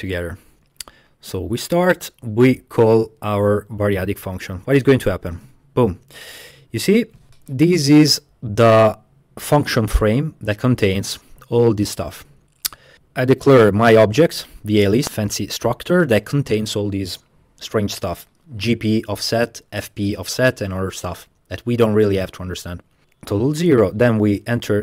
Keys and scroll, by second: 5.4 space, 23.4 space, 24.2 space.